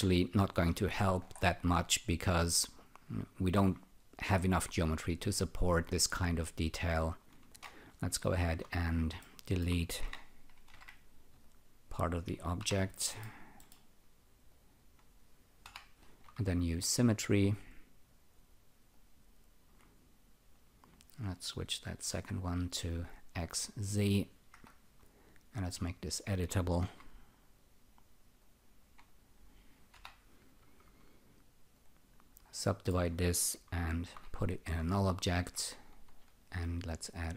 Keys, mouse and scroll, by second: 0.5 click, 0.7 shift+., 1.2-1.6 scroll down 4, 1.7 alt+click, 6.4 alt+click, 8.2 F2, 9.2 alt+middle click, 10.0-11.2 typing, 11.4 click, 12.6 Delete, 13.1 middle click, 13.6 middle click, 14.5 click, 15.6 Delete, 17.2 alt+click, 18.9 alt+click, 21.9 click, 22.8 click, 23.6 alt+right click, 24.5 F1, 25.8 click, 26.8 c, 27.6 click, 28.4 click, 29.1 click, 29.9 Delete, 30.4 click, 31.7 alt+click, 32.6 alt+middle click, 34.0 alt+g, 35.0 alt+click, 36.8 shift+click.